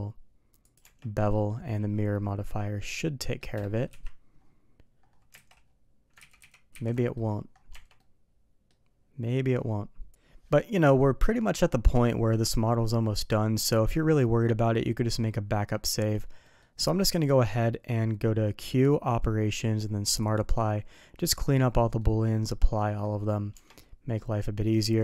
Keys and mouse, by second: 0.7 Tab, 1.1 middle click, 2.5-3.3 middle drag, 5.3 alt+a, 6.2 ctrl+z, 6.9 middle drag, 7.6 Tab, 7.9-8.6 middle drag, 10.7-11.2 middle drag, 15.7 middle drag, 16.4 middle click, 17.0 q, 21.9-22.8 middle drag, 23.5 Tab, 23.7-24.1 middle drag, 24.5 middle drag.